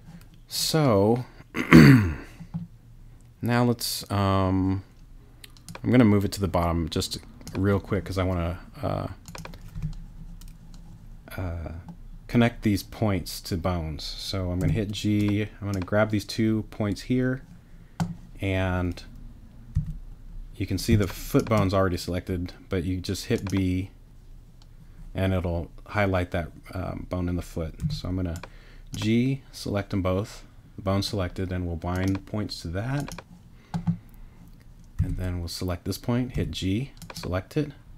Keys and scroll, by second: 9.7 t, 14.6 g, 19.7 b, 20.9 space, 27.8 g, 35.0 b, 36.3 g.